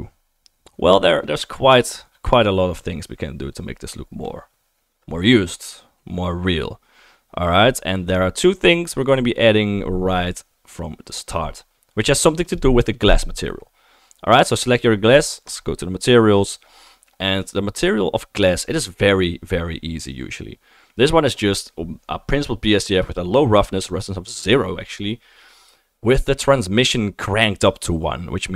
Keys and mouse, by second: 12.6-28.5 drag.